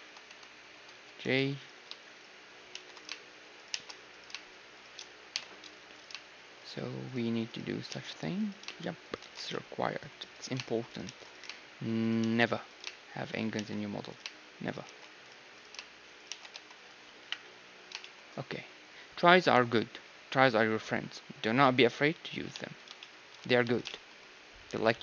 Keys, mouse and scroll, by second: 0.9 j, 1.6-18.3 right drag, 2.7 shift+r, 3.7 shift+r, 5.3 j, 7.9 shift+r, 9.2 shift+r, 9.5-11.3 middle drag, 11.0 shift+r, 12.2 shift+r, 13.5 shift+r, 14.8 shift+r, 16.2 shift+r, 16.5 a, 17.2 KP_1, 18.3-20.2 middle drag, 18.7 z, 20.5 middle click, 20.8 middle click, 21.7 middle click, 22.5-23.6 middle drag, 22.5 z, 23.6 z.